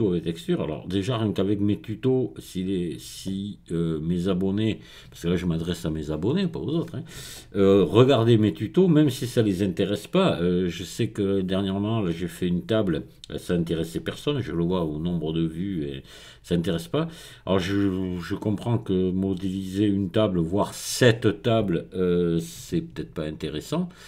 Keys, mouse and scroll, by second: 23.7 click.